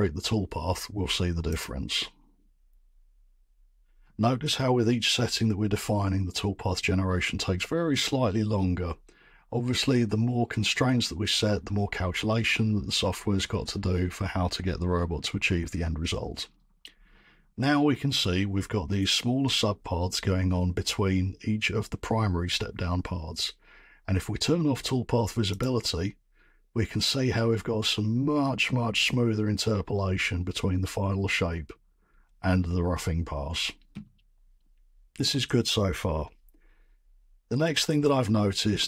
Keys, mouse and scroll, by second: 1.6 click, 6.6 click, 27.1-30.6 drag.